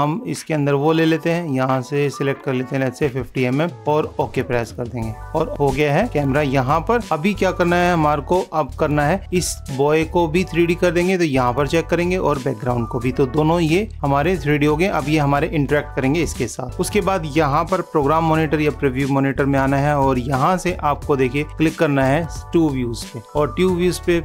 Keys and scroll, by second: 5.3 super+=, 16.7 super+=.